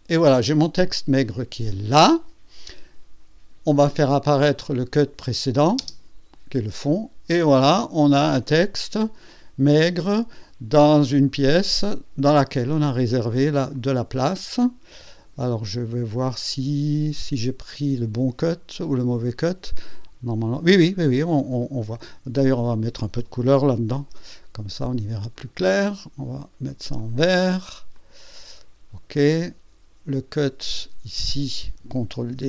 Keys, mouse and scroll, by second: 0.8-2.3 drag, 4.6 click, 5.8 space, 6.7-7.9 drag, 8.0 scroll up 1, 8.7 scroll down 1, 9.3 click, 11.8-12.7 drag, 12.7 scroll up 2, 13.7-15.5 drag, 15.6-16.0 scroll down 1, 16.3-17.2 drag, 21.5 scroll up 1, 21.8-22.1 scroll down 1, 22.5 click, 23.9 ctrl+d, 25.3 click, 26.9 click, 27.9 click, 29.1 click, 30.1 click, 32.2 ctrl+d.